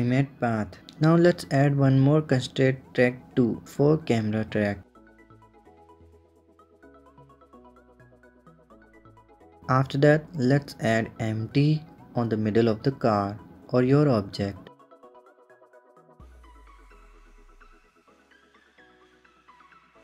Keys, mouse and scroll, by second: 3.6-6.7 drag, 8.4 click, 9.2 shift+a, 15.3 click, 16.0 KP_1, 16.4 click, 16.8 KP_7, 17.6-18.6 middle drag, 19.2 click.